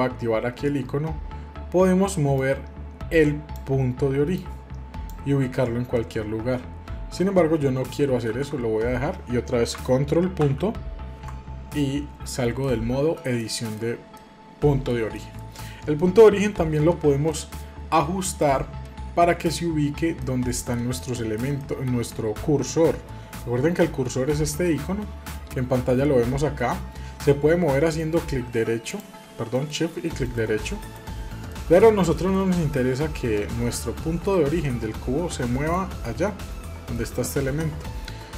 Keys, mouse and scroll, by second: 2.4-3.5 drag, 4.4-7.3 drag, 7.8 ctrl+z, 8.2 ctrl+z, 10.4 ctrl+., 12.6-16.5 middle drag, 17.3-24.6 middle drag, 28.0-31.2 right drag, 31.5-36.5 middle drag, 36.9-38.3 middle drag.